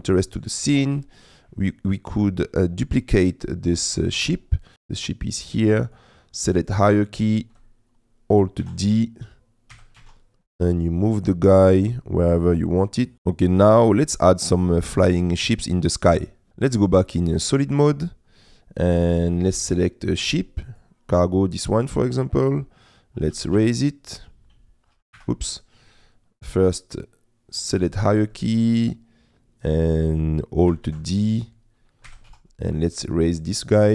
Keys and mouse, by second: 0.1 shift+middle click, 2.4 click, 4.7-5.9 middle drag, 8.9 alt+d, 9.7 g, 10.0 shift+z, 21.5-23.3 middle drag, 23.4 g, 23.6 z, 25.2 Escape, 26.6-28.0 drag, 28.4 click, 31.1 alt+d, 32.1 g, 32.3 z.